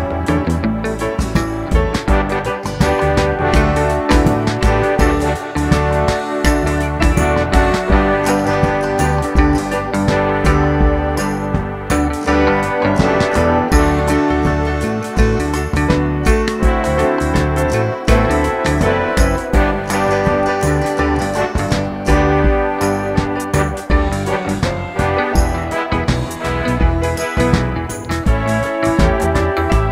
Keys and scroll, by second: 7.4 Tab, 26.1 super+d.